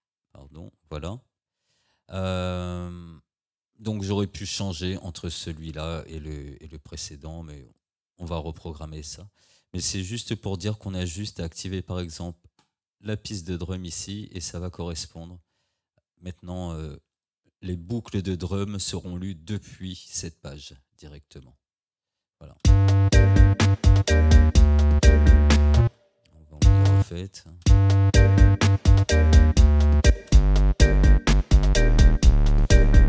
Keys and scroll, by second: 22.7 space, 25.9 space, 30.1 space.